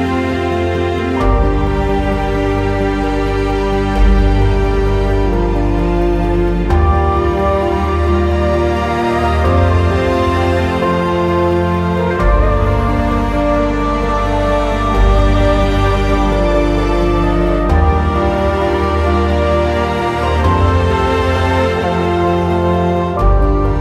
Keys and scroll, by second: 0.6 ctrl+z, 8.4 F4, 17.7 alt+x.